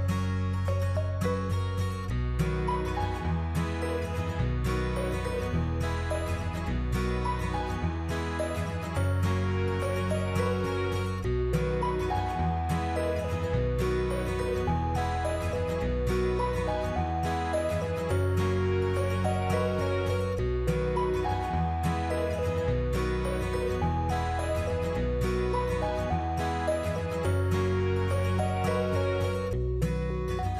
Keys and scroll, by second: 16.1 -, 16.5 2, 16.7 Return, 18.6 -, 19.2 4, 20.6 Return, 24.2 ctrl+-, 29.8 ctrl+z.